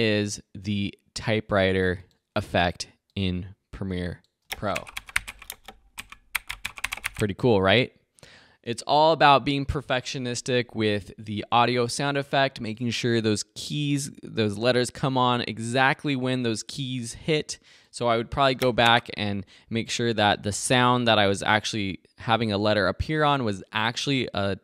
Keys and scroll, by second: 4.4 space, 9.2 space, 18.5 space.